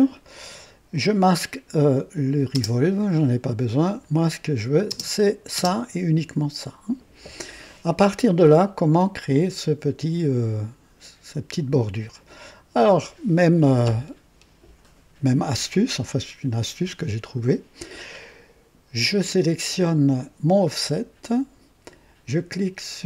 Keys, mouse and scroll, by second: 0.9 click, 2.7 space, 3.8 click, 4.9 space, 5.5 space, 8.5-9.3 drag.